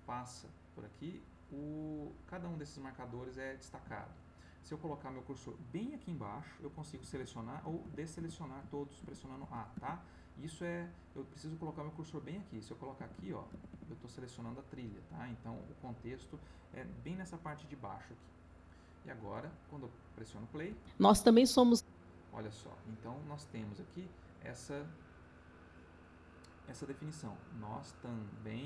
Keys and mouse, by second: 1.8-5.6 middle drag, 3.8 a, 6.9 a, 12.9 a, 18.3 click, 20.7 space, 21.5 space, 23.2-28.6 drag.